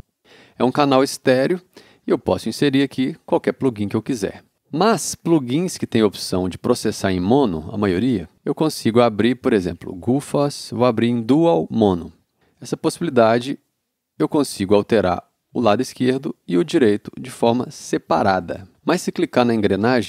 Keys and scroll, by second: 18.7 space.